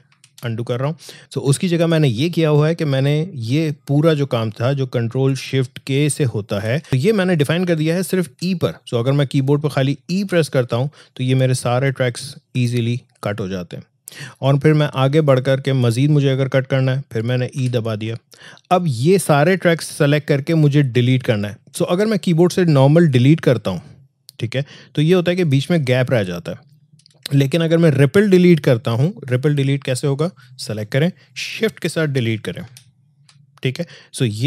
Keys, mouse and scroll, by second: 0.1 ctrl+z, 6.5 ctrl+shift+k, 6.9 ctrl+z, 10.2 e, 14.9-17.5 drag, 17.5 e, 19.3-22.9 drag, 25.6 Delete, 27.4 ctrl+z, 30.0-32.6 drag, 32.6 shift+Delete.